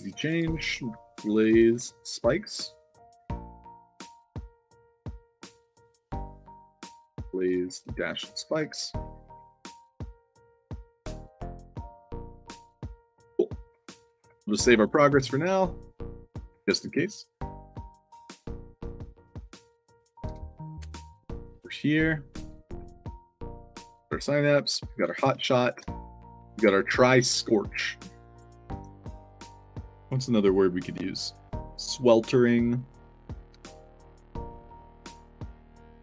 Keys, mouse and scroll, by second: 0.1-2.1 typing, 2.6 click, 3.9 click, 5.4 click, 6.8-9.2 typing, 9.4 ctrl+c, 9.9 click, 10.6 click, 11.3 click, 11.5 click, 11.8 ctrl+v, 11.9 click, 12.3 click, 13.7 ctrl+s, 17.5 click, 19.0 click, 19.4 click, 19.9 click, 20.2 f, 22.0 click, 22.2 c, 22.7 space, 24.0-26.2 typing, 24.8 click, 28.2 click, 29.2 click.